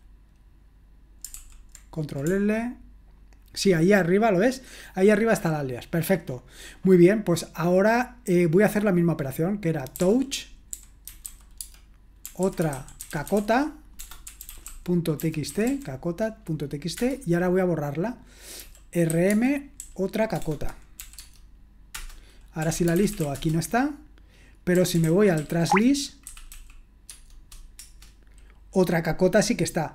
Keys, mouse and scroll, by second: 1.3 super+l, 9.9-16.1 typing, 16.9 Return, 18.6-21.0 typing, 21.1 Tab, 21.9 Return, 22.4-27.8 typing.